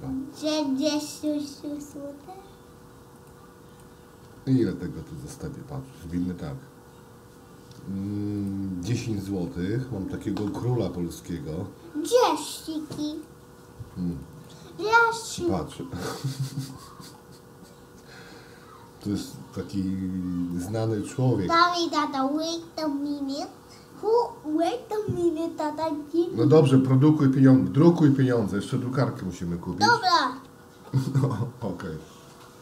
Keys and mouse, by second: 1.2 click, 1.7 x, 2.7 x, 4.3 x, 6.3 shift+a, 16.1 shift+middle click, 20.6-21.1 shift+middle drag, 21.8-23.2 middle drag, 30.3 shift+d.